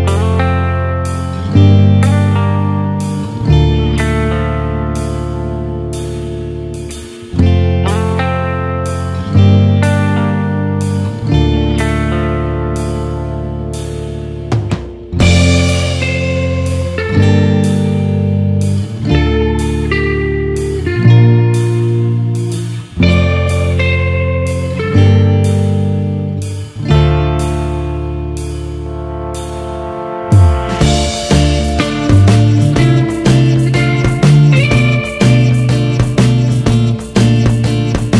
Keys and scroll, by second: 23.9 ctrl+-, 25.9 ctrl+space, 26.9 ctrl+-.